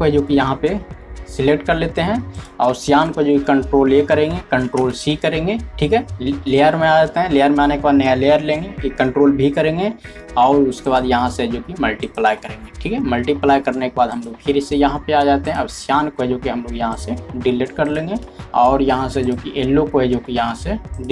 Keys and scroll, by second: 0.3-1.8 typing, 4.0-5.4 typing, 8.8 ctrl+v, 16.2 typing.